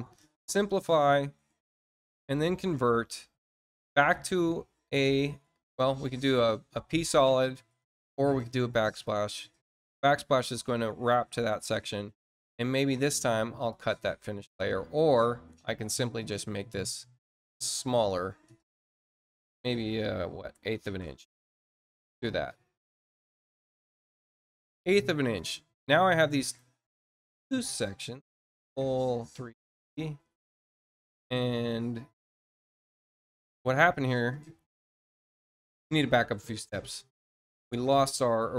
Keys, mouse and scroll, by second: 0.1 click, 1.7 click, 8.8 click, 13.6 click, 15.5 click, 16.1 click, 17.6 click, 17.9 click, 22.8 click, 23.5 click, 25.3 click, 26.3 shift+click, 28.1 click, 30.6 click, 32.2 click, 37.4 click.